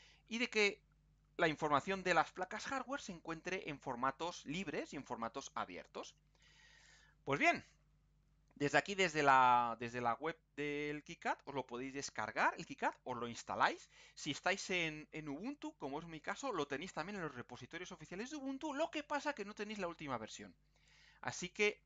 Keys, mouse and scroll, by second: 3.7 scroll down 2, 8.6-8.9 scroll down 2, 9.2-9.6 scroll up 2.